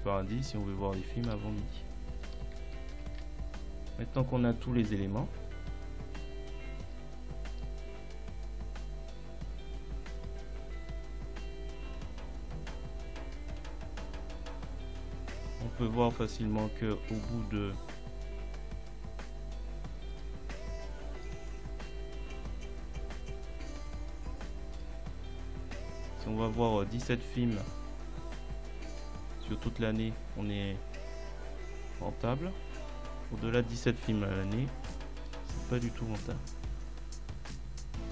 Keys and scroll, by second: 1.3 ctrl+Up, 2.2 Left, 2.8 ctrl+Left, 3.5 Right.